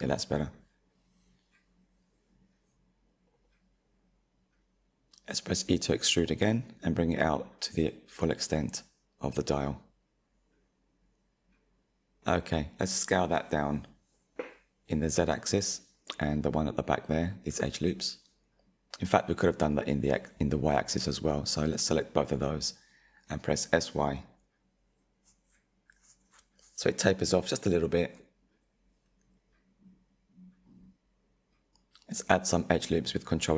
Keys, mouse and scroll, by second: 5.2 e, 11.3 scroll down 5, 11.6 middle click, 11.7 scroll, 12.4-12.7 scroll up 1, 12.7 s, 15.6 2, 15.8 alt+click, 16.1 s, 18.4-21.1 middle drag, 21.1 alt+shift+click, 23.3 s, 27.4-32.2 middle drag, 32.2 ctrl+r.